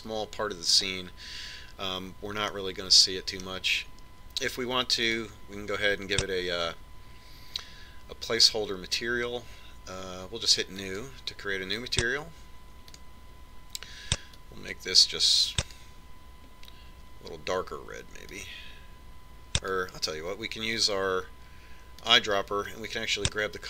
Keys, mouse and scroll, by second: 3.6-5.4 middle drag, 6.1 click, 11.9 click, 14.0 click.